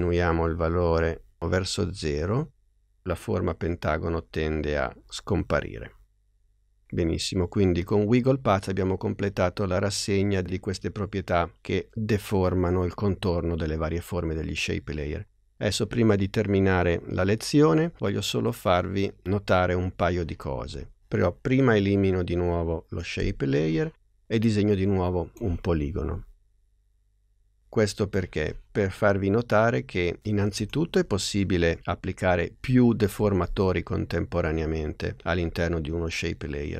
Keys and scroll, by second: 22.5 BackSpace.